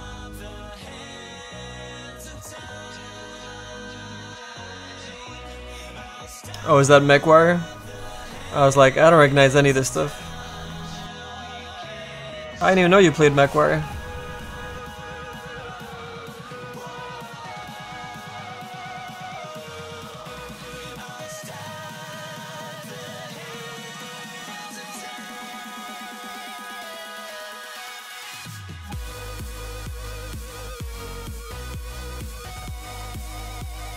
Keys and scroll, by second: 13.9 s, 14.8 s.